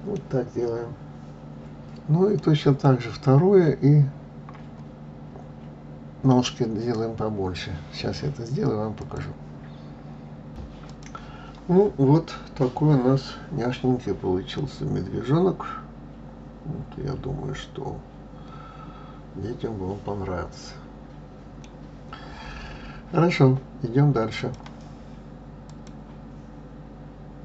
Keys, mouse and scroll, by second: 0.2 scroll down 4, 0.9 scroll up 2, 2.4-5.4 middle drag, 10.9-11.6 shift+middle drag, 14.4-17.5 middle drag, 24.2 click.